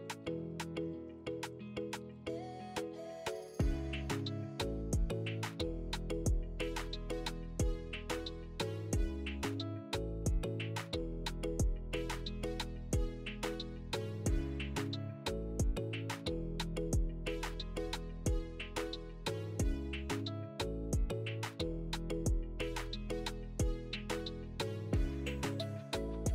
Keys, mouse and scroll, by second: 5.0 ctrl+r, 12.3 middle click, 14.8 click, 16.3 3, 17.8 1, 19.3 2, 20.6 3, 22.8 click, 24.3 x.